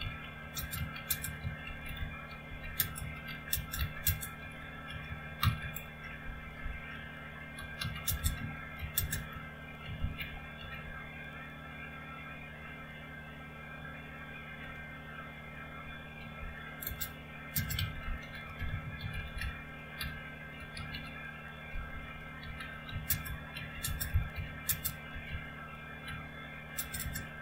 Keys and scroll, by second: 0.0-11.2 typing, 14.8 Return, 17.5-27.0 typing.